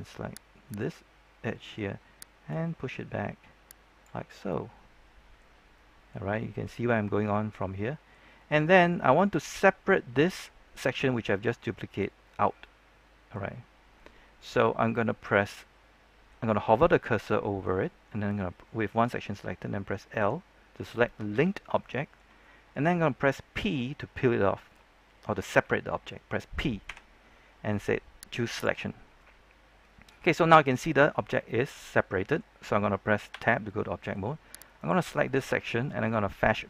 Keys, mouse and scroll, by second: 1.5 middle click, 2.4 click, 4.1 scroll down 1, 4.4-10.9 middle drag, 11.0-13.3 shift+middle drag, 13.5-13.9 scroll down 1, 13.9 middle click, 17.2-20.1 scroll up 1, 20.1 l, 20.6 middle click, 22.3 shift+middle click, 26.8 p, 28.4 click, 28.9 scroll down 1, 29.1 middle click, 31.2-31.7 scroll up 1, 31.7 middle click, 33.2 Tab, 33.6 middle click, 34.7 right click, 35.2-36.6 middle drag.